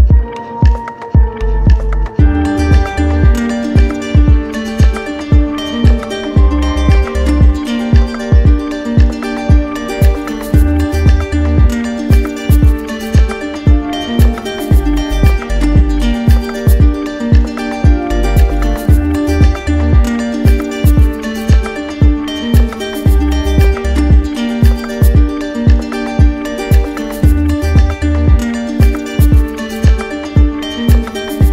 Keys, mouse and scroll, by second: 0.3 click, 0.6 click, 1.0 click, 2.1 click, 2.7 right click, 3.2 right click, 3.6-4.6 drag, 4.7-6.8 drag, 6.8 right click, 7.7 click, 7.8 click, 8.1 click, 9.3 click, 9.8 shift+click, 10.4 shift+click, 11.3 click, 11.9 click, 13.4 click, 15.7 click, 16.7 click, 17.2 click, 19.1 click, 19.9 click, 20.3 click, 20.8 click, 21.3 click, 22.1 click, 22.6 click, 23.0 click, 23.5 click, 24.5 click, 25.3 click, 25.9 click, 26.6 click, 28.2 click, 28.2 click, 29.5 alt+click, 30.9 click, 31.0 right click, 31.2 click.